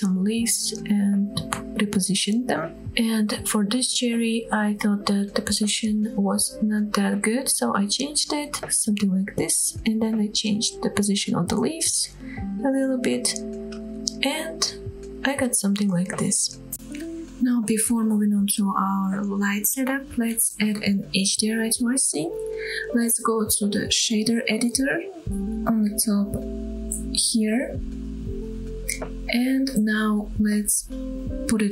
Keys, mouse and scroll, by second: 0.8 click, 1.1 KP_7, 1.3 scroll down 2, 1.5 shift+middle click, 1.7 g, 2.5 click, 2.7 scroll down 1, 3.4 middle click, 3.7 r, 3.9 z, 4.8 click, 4.9 middle click, 5.2 middle click, 5.5 scroll up 2, 5.6 shift+middle click, 5.9-6.2 shift+middle drag, 6.3 g, 6.4 z, 7.1 shift+drag, 7.2-7.9 scroll down 4, 7.5 middle click, 7.7 click, 8.0-8.3 middle drag, 8.5 scroll up 3, 8.7-9.2 shift+middle drag, 11.1 click, 11.2 middle click, 11.4 KP_7, 11.6 scroll up 3, 11.7 shift+middle click, 12.2 g, 13.2 click, 13.4 r, 13.6 click, 13.7 g, 14.4 click, 14.8 scroll down 3, 15.0 middle click, 15.0-15.5 scroll down 3, 15.2 click, 15.4 shift+middle click, 15.6 middle drag, 15.9-16.7 scroll up 1, 16.7-17.3 scroll down 2, 17.3-19.4 drag, 21.2-28.0 drag, 28.6-29.0 scroll up 2, 29.0 scroll down 1, 29.4 shift+middle click, 30.3-31.5 drag.